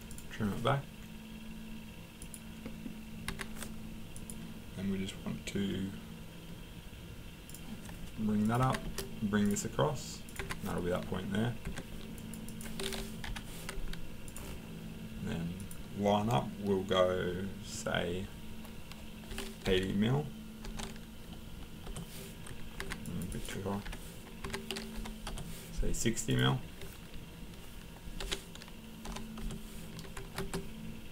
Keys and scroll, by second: 3.3 Escape, 8.6 Escape, 10.4 Escape, 11.6 Escape, 13.3 Delete, 19.6-21.1 typing, 21.8 Return, 22.8 Escape, 23.8 Delete, 24.4 Escape, 25.0 l, 25.3 Return, 28.2-29.1 typing, 29.4 Return, 30.2 Escape.